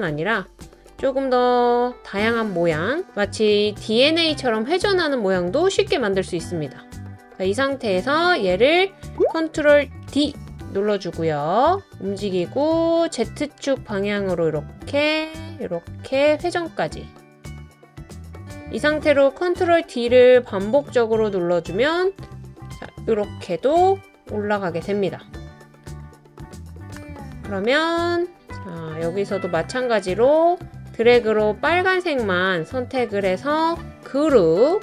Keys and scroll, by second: 1.2 BackSpace, 9.5 super+d, 19.7 super+d, 20.1 super+d, 20.4 super+d, 23.7 super+d.